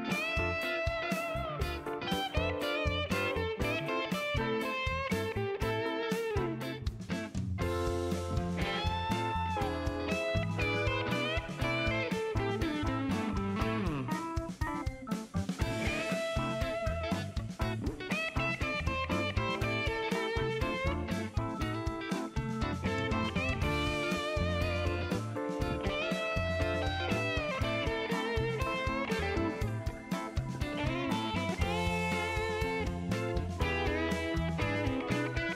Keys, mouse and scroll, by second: 4.0 scroll up 1, 5.2-6.8 drag, 7.0 middle click, 8.2 click, 9.3 click, 10.5 middle click, 11.7 middle click, 12.8 click, 13.6 click, 14.5 click, 15.3 click, 16.1 click, 16.5 right click, 17.2 click, 17.7 click, 18.7 click, 19.5 click, 21.3 click, 23.2 middle click, 24.2 middle click, 24.7 middle click, 25.3 middle click, 27.0 click, 28.6 click, 30.3 click, 31.4 click, 31.9 middle click, 33.1 click, 33.6 middle click, 34.3 right click.